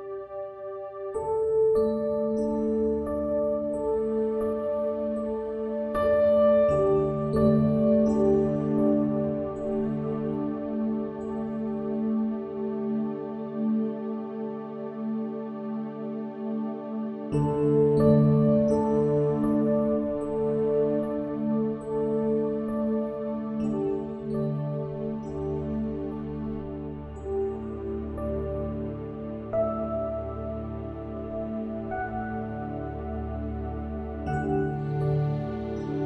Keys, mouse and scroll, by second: 4.7-6.4 drag, 6.1 ctrl+z, 7.4-9.3 drag, 10.4-12.7 middle drag, 13.4-20.2 drag, 14.6 Tab, 21.3-23.5 middle drag, 23.5-26.9 drag, 24.8 s, 29.5-31.4 drag, 31.8-33.6 middle drag, 32.4 Tab, 33.2 Tab, 34.7-36.0 middle drag.